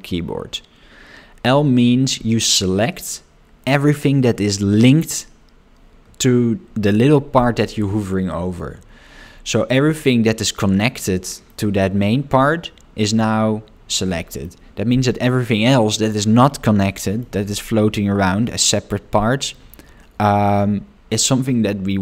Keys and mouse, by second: 10.1-14.5 middle drag, 17.0 shift+middle click, 19.6-22.0 middle drag.